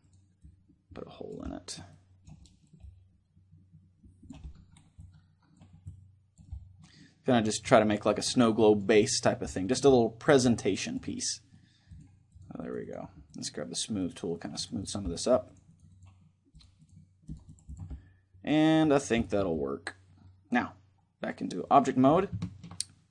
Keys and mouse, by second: 1.1-4.0 middle drag, 4.1-6.0 middle drag, 4.7-13.0 drag, 6.3-12.7 middle drag, 13.8-20.8 drag, 14.7-16.6 middle drag, 17.6-20.9 middle drag, 21.5-22.7 drag, 22.1-23.1 middle drag.